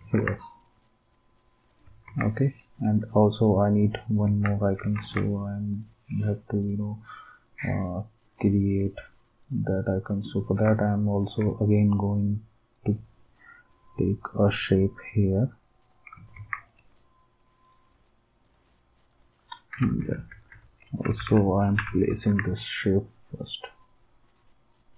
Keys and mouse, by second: 0.1 ctrl+s, 2.0 ctrl+s, 4.9 ctrl+s, 16.3 ctrl+s, 20.0 Left, 20.3 Up, 20.5 Up, 21.1 Down, 21.2 Down, 21.8 Down, 22.2 ctrl+s.